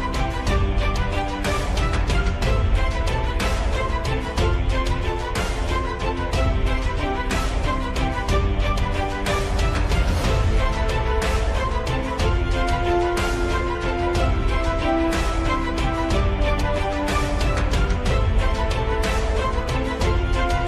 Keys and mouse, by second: 1.6 g, 4.6 r, 6.3 r, 8.4 r, 14.5 KP_1, 15.9 Tab, 16.3-18.6 middle drag, 19.3 Tab, 20.5 KP_1.